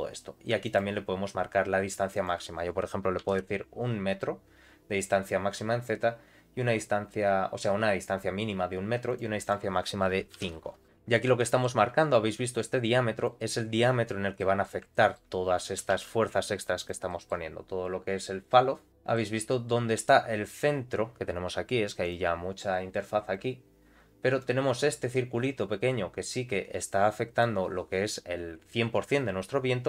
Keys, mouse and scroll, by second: 0.6 click, 2.1-5.0 drag, 6.4-9.1 middle drag, 9.1 click, 9.4-10.8 drag, 10.8 shift+Left, 11.0 scroll down 2, 11.3 shift+middle click, 12.1 g, 13.3 middle click, 14.0 scroll up 1, 14.3 middle click, 14.9 shift+middle click, 15.2-15.8 scroll down 2, 15.8 g, 17.1 middle click, 18.4 click, 18.8 scroll up 2, 18.9 shift+middle click, 22.0 click, 23.2 click, 23.6-24.4 scroll down 1, 24.4-27.3 drag.